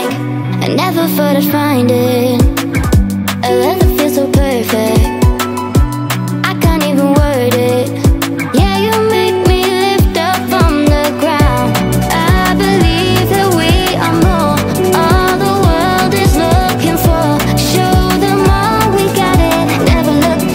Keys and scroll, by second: 16.1 Return, 16.7-19.1 typing.